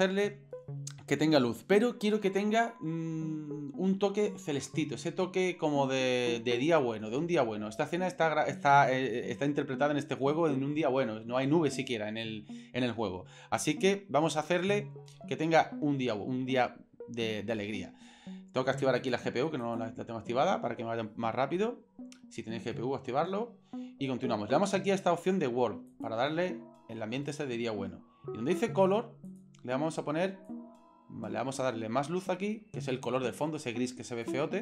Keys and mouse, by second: 19.0-20.1 drag, 25.9 click, 31.8 right click, 33.1 right click.